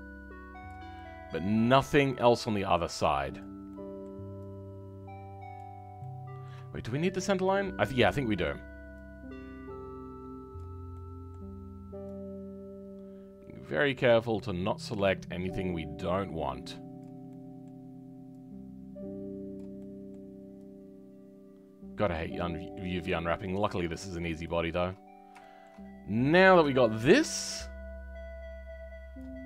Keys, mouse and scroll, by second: 0.6 shift+click, 0.9-3.3 shift+middle drag, 3.3 shift+click, 3.6-5.5 shift+middle drag, 5.5 shift+click, 5.9-10.5 shift+middle drag, 10.5 shift+click, 10.9-14.3 shift+middle drag, 14.3 shift+click, 14.6-17.0 shift+middle drag, 17.0 shift+click, 17.2-19.5 shift+middle drag, 19.5 shift+click, 19.7-22.1 shift+middle drag, 22.1 shift+click, 22.3-24.4 shift+middle drag, 24.4 shift+click, 25.0-25.4 scroll down 2, 25.4-29.1 shift+middle drag, 29.1 click.